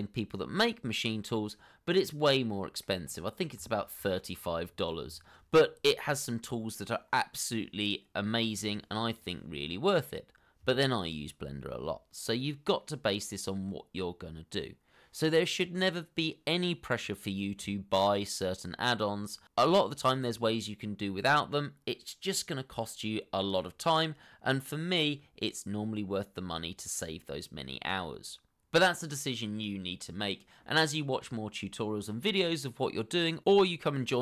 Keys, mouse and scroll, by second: 0.0 scroll down 1, 1.4 shift+middle click, 2.5 scroll down 1, 3.6 middle click, 4.5 scroll down 1, 5.3 scroll up 1, 6.0 shift+middle click.